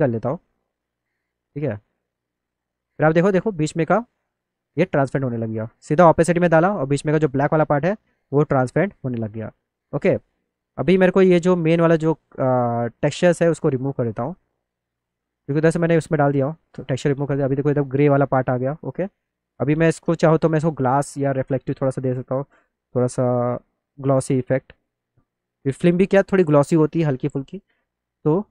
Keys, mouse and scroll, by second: 0.4 click, 2.3 click, 3.1 middle click, 3.4-4.7 alt+middle drag, 5.0 middle click, 6.4 middle click, 6.7 alt+middle click, 7.3 alt+middle click, 7.7 alt+middle click, 9.0 middle click, 9.3 middle click, 13.6 click, 14.6 click, 15.6 right click, 16.1 right click, 17.0 alt+middle click, 19.0 click, 21.5 click, 22.6-23.8 drag, 24.4 click, 27.8-28.5 drag.